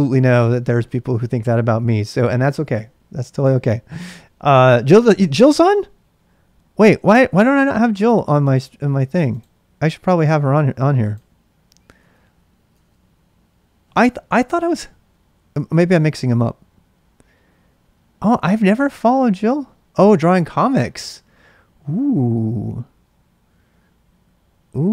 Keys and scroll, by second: 12.0 super+Tab, 12.7 super+Tab.